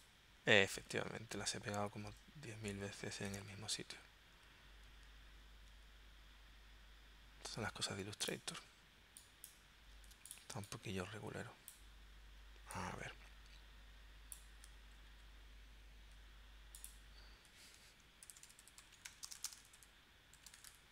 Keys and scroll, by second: 0.7 super+z, 1.3 super+z, 2.0 super+z, 2.7 super+z, 3.4 super+z, 5.7 super+z, 10.1 super+z, 18.2-20.9 typing.